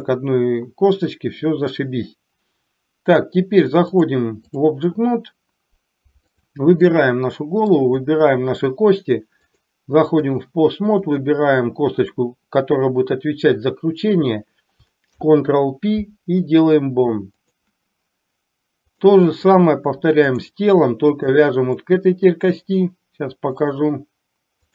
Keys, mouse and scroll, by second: 4.1 click, 6.5 click, 6.8 middle click, 8.2 shift+click, 9.5-10.5 drag, 15.2 ctrl+p, 19.1 click, 21.2 shift+click, 21.7 middle click, 23.6-24.7 drag.